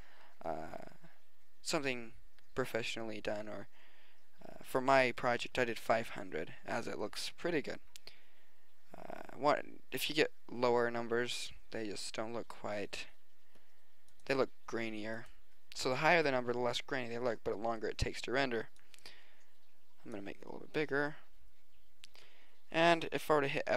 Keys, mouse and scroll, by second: 14.1-16.1 drag, 16.6 middle click, 17.8 middle click, 18.4 middle click, 18.9-20.4 drag, 21.5 middle click, 21.9 middle click, 22.1 middle click, 23.4 scroll up 1.